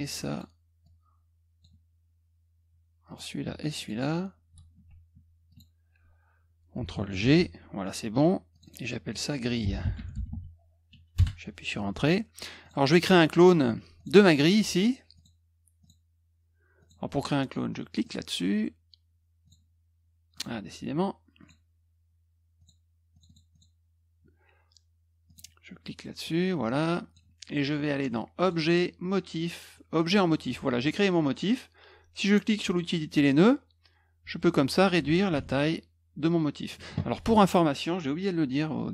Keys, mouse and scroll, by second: 0.3 click, 0.8 click, 3.0 click, 3.8 shift+click, 5.5 ctrl+click, 7.2 ctrl+g, 8.5 click, 8.6 click, 9.3-10.8 typing, 11.1 Return, 12.6 click, 13.9 click, 15.1 click, 15.8 click, 16.8 click, 18.0 click, 19.4 click, 20.3 click, 21.4 click, 22.5 click, 23.1 click, 23.2 click, 23.5 click, 25.2 click, 26.2-27.1 drag, 28.4 click, 30.0 click, 32.6 click, 34.5-36.7 drag.